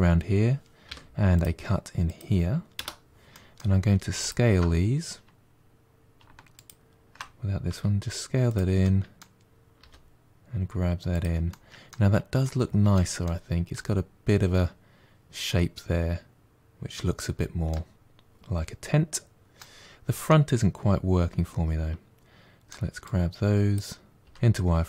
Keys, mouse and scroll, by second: 0.7 k, 3.2 middle click, 4.0 alt+click, 6.5 shift+click, 7.6 s, 8.7 middle click, 9.7 g, 11.3 middle click, 12.0 scroll down 3, 12.3-12.8 middle drag, 12.8 Tab, 13.1-16.4 middle drag, 17.0-17.3 scroll down 1, 17.3 Tab, 17.5-19.7 middle drag, 19.7-20.1 scroll up 1, 20.1-22.9 middle drag, 22.9 click, 24.1 middle click.